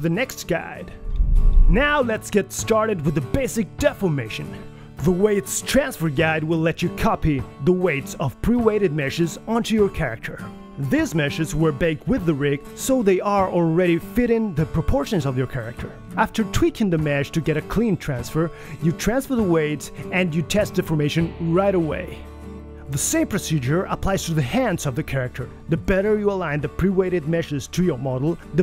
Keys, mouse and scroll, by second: 0.4 click.